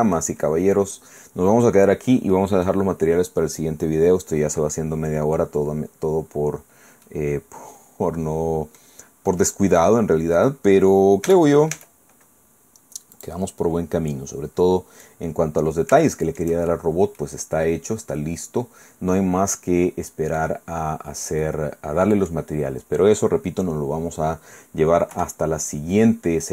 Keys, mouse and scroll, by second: 0.4-0.7 scroll up 2, 1.6-2.0 scroll down 2, 2.3 click, 3.3 scroll up 2, 4.9-5.6 scroll up 2, 5.6 scroll down 2, 6.5-7.0 scroll up 1, 7.0-10.3 middle drag, 10.3 scroll down 1, 10.5-11.6 scroll up 1, 11.3 Tab, 13.2 click, 13.8 scroll down 2, 14.1-15.4 drag, 15.4-16.1 scroll up 2, 16.1 shift+click, 16.6 shift+scroll up 2, 16.7 shift+scroll down 2, 17.2 click, 17.9-18.6 scroll down 2, 21.2 scroll down 2, 21.4 middle click, 21.8 click, 25.1 KP_1, 25.9-26.5 scroll up 2.